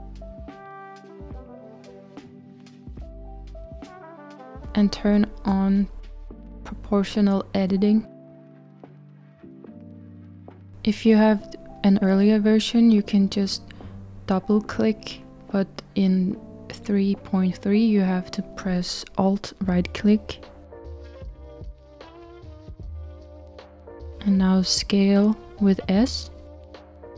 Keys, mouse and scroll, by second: 6.3 click, 13.4 click, 13.7 click, 16.1 alt+click, 21.3 s.